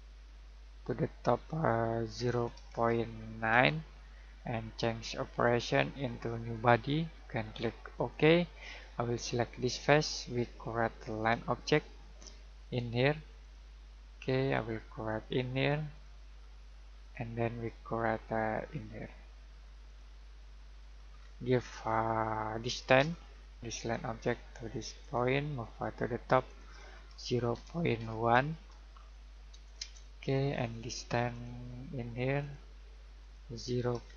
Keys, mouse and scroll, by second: 3.2-4.0 typing, 5.4 click, 21.1-23.0 scroll down 1, 23.0 d, 23.7 click, 27.5 typing, 29.8 Return, 31.3 click, 34.0 typing.